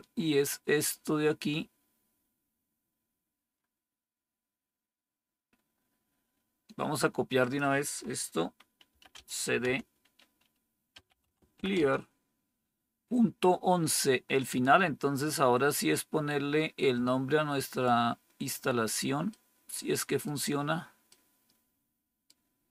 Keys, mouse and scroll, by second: 8.6-9.5 typing, 10.8-12.0 typing.